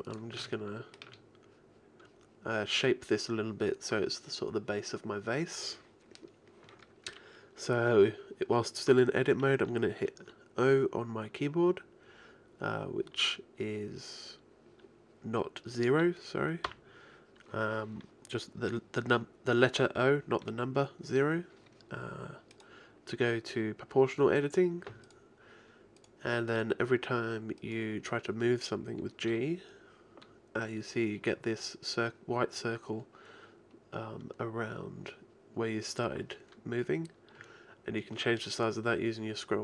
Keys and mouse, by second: 0.5-2.9 drag, 16.7 o, 22.6-24.2 right drag, 28.1-29.3 right drag, 29.3 g.